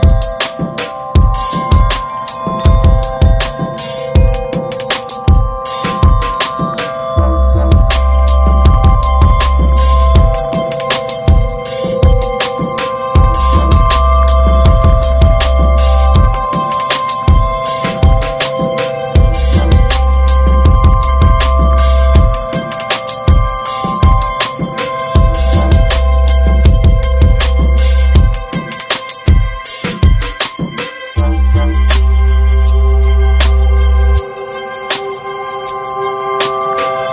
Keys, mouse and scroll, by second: 1.0 Tab, 2.0 alt+z, 2.3 alt+z, 2.6 Tab, 2.7 click, 3.1 Tab, 3.4 ctrl+s, 3.6 click, 3.9 alt+z, 4.1 Tab, 4.2 click, 4.4 scroll down 4, 4.7 middle click, 4.9 Tab, 5.0 drag, 5.2 scroll up 3, 5.4 middle click, 5.7 ctrl+s, 5.9 click, 6.3 /, 6.6 middle click, 6.9 Tab, 7.1-8.7 middle drag, 8.7 ctrl+r, 11.2 Tab, 11.3 click, 11.5 scroll down 2, 11.7 alt+middle click, 11.9 alt+middle click, 12.2 ctrl+s, 12.5 Tab, 13.0 alt+z, 13.4 scroll up 1, 13.7 shift+middle click, 14.4 click, 16.1 shift+middle click, 16.3-18.4 drag, 18.9 click, 19.5 click, 20.7-22.3 drag, 22.8 scroll down 3, 22.9 Tab, 23.1 click, 23.3 alt+z, 23.8 alt+z, 24.0 Tab, 24.2-24.7 scroll up 1, 24.7 click, 25.2 scroll up 2, 25.5-26.5 drag, 27.3-28.3 drag, 29.0 click, 29.6 click, 30.3 scroll down 2, 30.4 Tab, 30.7 alt+z, 30.8 click, 31.2 ctrl+s, 32.5 alt+z, 33.0 click, 33.8 click.